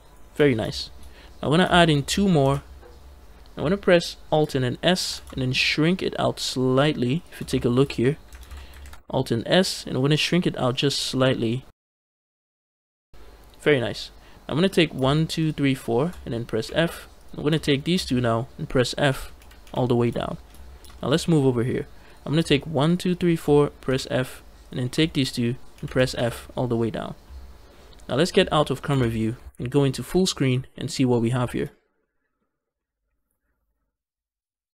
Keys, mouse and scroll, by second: 0.6 shift+middle click, 0.9-1.5 scroll up 1, 1.6 shift+middle click, 2.3 ctrl+r, 3.0 right click, 3.0 shift+middle click, 3.0 scroll down 1, 4.8 alt+s, 7.0 shift+click, 7.4 shift+middle click, 8.3 ctrl+z, 8.7 alt+f, 8.7 alt+s, 12.2 shift+click, 14.5 click, 14.9 shift+click, 15.2 shift+click, 15.6 shift+click, 16.4 f, 17.0 shift+click, 17.5 shift+click, 18.9 f, 19.2 f, 19.5 f, 20.1 shift+middle click, 20.4 scroll up 2, 20.8 shift+middle click, 21.9 click, 22.4 shift+click, 22.7 shift+click, 23.0 shift+click, 23.7 f, 24.5 click, 24.8 shift+click, 25.6 f, 25.8 f, 26.8 f, 28.7 KP_0, 29.9 ctrl+space, 30.6 shift+middle click, 31.0 middle click, 31.3 shift+middle click, 31.6 scroll up 2, 31.9 middle click, 32.3-32.6 scroll up 1, 32.6-34.7 middle drag.